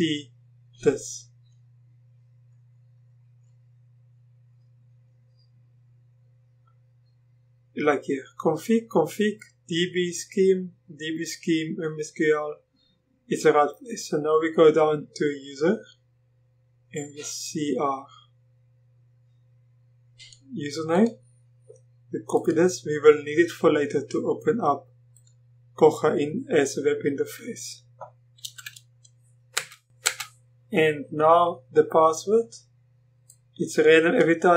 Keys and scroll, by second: 28.4 ctrl+v, 29.6 Return, 30.0 Return.